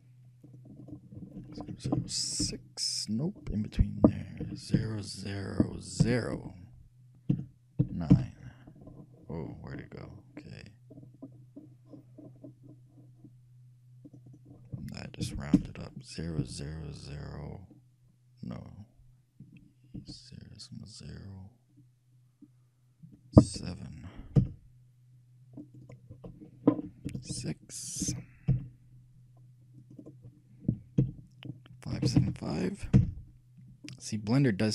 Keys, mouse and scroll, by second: 0.6-5.3 drag, 9.7 middle click, 10.3-11.2 scroll down 1, 11.2 middle click, 11.2 scroll down 1, 11.4 middle click, 11.6 middle click, 14.2-16.0 drag, 25.8-27.5 drag, 30.0-31.8 drag.